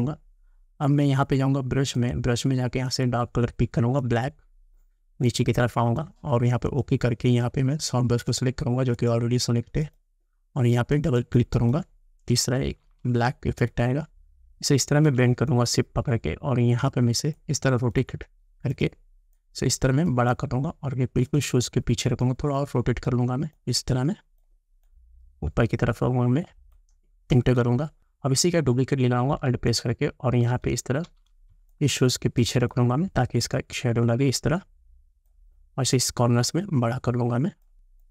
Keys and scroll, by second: 27.4 Return.